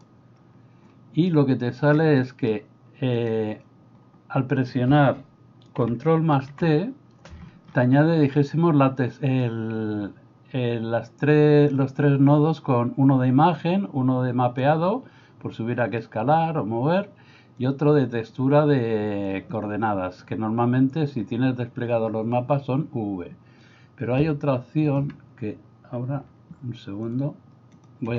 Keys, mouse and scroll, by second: 1.4 middle click, 2.3 middle click, 3.1 click, 6.5 ctrl+t, 17.8 click, 24.8 click, 27.1 shift+click, 27.7 shift+click.